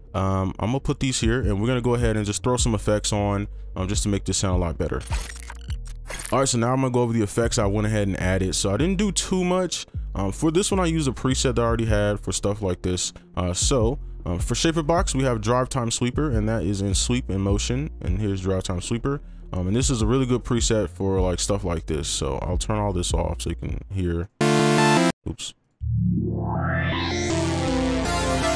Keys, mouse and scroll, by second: 1.1 right click, 2.1 double click, 22.8 double click, 24.2 right click, 25.1 space, 25.8 space.